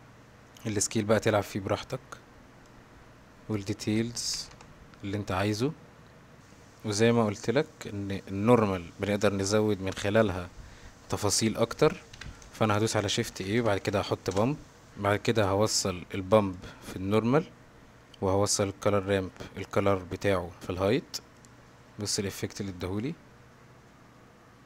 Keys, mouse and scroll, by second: 3.6 click, 6.4 g, 6.7 middle click, 9.0 click, 9.3-12.1 drag, 12.9 shift+a, 15.9-16.6 drag, 18.5-19.0 drag, 19.9-21.5 drag.